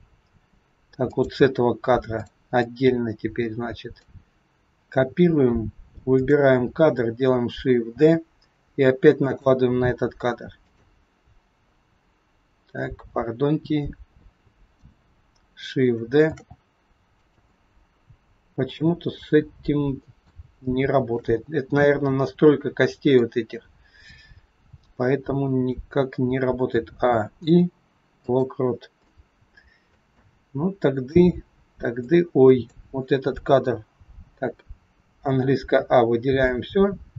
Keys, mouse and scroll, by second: 1.1 click, 2.1 click, 2.4 click, 6.1 click, 8.0 shift+d, 10.6 click, 14.6 click, 16.2 shift+d, 19.1 middle click, 20.6 shift+middle click, 21.9 middle click, 26.7 a, 27.3 i, 29.1 middle click, 30.1 middle click, 30.1 scroll up 1, 32.0 click, 35.0 a, 36.3 click.